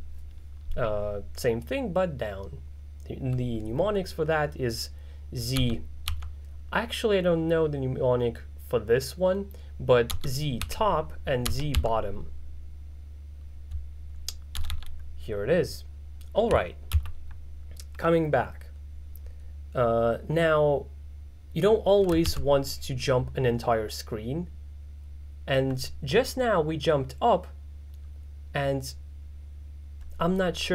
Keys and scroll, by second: 0.0-0.2 typing, 5.6 z, 6.2 z, 10.2-12.3 typing, 14.6 z, 14.8 z, 22.3 ctrl+b.